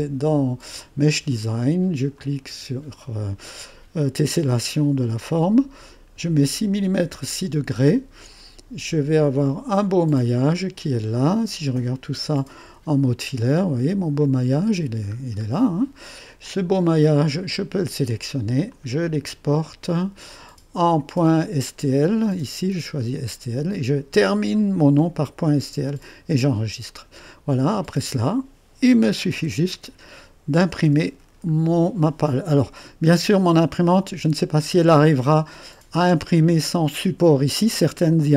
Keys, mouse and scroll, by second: 2.2 click, 7.7 click, 9.4 click, 11.2 click, 12.7 2, 13.6 click, 14.3 click, 15.1-15.7 scroll up 1, 15.7-17.0 scroll down 1, 17.6-19.6 drag, 20.9 click, 26.9 click, 28.3-29.4 drag, 29.4 Delete, 30.9 Delete, 32.6 1, 34.6-36.0 right drag.